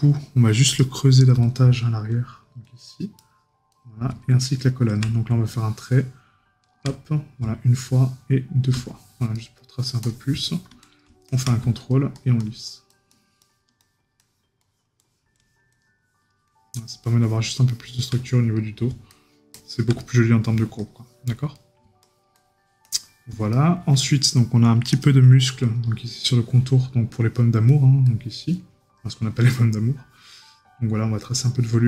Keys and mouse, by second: 9.3 right click, 18.3 right click, 20.0 right click, 21.5 right click, 23.5 right click, 26.1 right click.